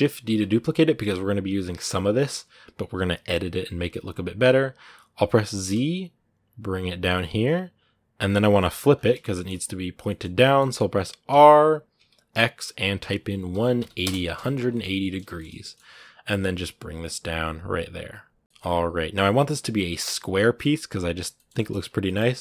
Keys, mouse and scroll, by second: 0.1 shift+d, 8.2 middle click, 8.7-9.1 scroll up 2, 9.1-11.1 shift+middle drag, 11.1 r, 14.2 middle click, 14.7 scroll up 1, 14.8 middle click, 15.3 scroll up 2, 15.4 middle click, 15.7 g, 18.4-19.6 middle drag, 19.6 scroll down 1, 19.8-22.1 shift+middle drag, 22.1 scroll up 1, 22.3 middle click.